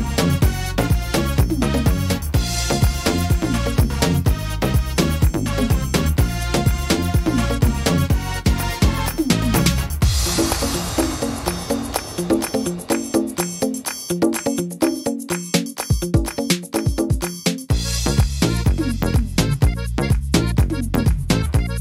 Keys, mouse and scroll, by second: 2.7 shift+right click, 3.5 shift+right click, 3.8 shift+right click, 4.2 shift+right click, 4.8 middle click, 5.8 c, 7.7 x, 8.8 middle click, 9.7 scroll up 2, 10.8 e, 11.9 click, 14.4 shift+d, 15.6 e, 16.6 click, 18.2 shift+middle click, 19.6 e, 21.1 click.